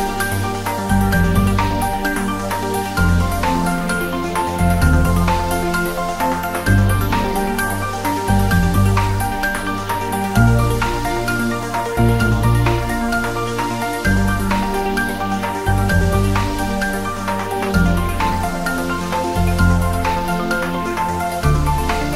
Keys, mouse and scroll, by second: 2.6 click, 3.4 scroll down 1, 3.7 g, 4.2 click, 4.7 shift+a, 6.3 click, 6.6-8.1 typing, 7.2 click, 7.9 click, 8.4 click, 9.3-10.0 scroll up 1, 11.0 scroll down 1, 11.1-13.3 typing, 11.7 click, 12.8 click, 13.8 click, 15.2-16.1 typing, 15.9-16.8 scroll down 2, 16.8 click, 17.4-17.9 scroll up 2, 17.9-18.4 drag, 18.5-18.9 scroll up 2, 18.9-19.2 drag, 19.4 g.